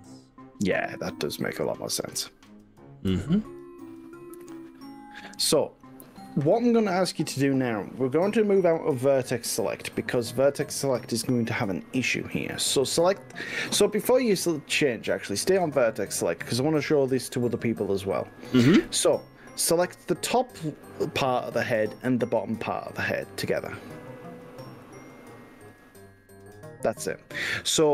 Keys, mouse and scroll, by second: 1.1 click, 1.7 click, 3.1 click, 10.5 click, 13.1 click, 16.1 click, 24.9 click.